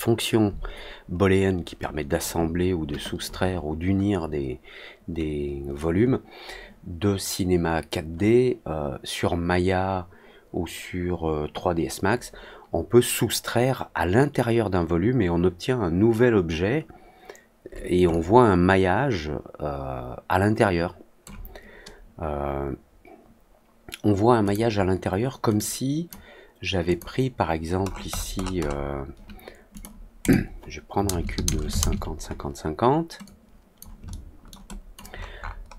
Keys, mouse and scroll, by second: 18.0-21.2 alt+drag, 24.4 click, 25.5 click, 26.8 click, 27.8 middle click, 28.0 middle click, 28.3 middle click, 28.5 middle click, 29.7 click, 30.1 click, 33.2-33.7 drag, 34.0-34.4 alt+middle drag, 34.6 alt+drag, 35.0 alt+middle click, 35.3 alt+middle click.